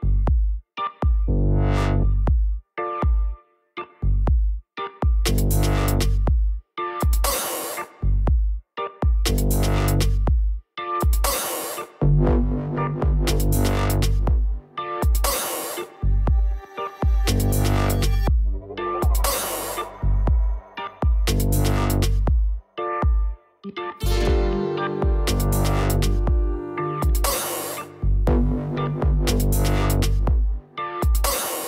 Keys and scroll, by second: 3.1-4.8 typing, 6.2-8.7 typing.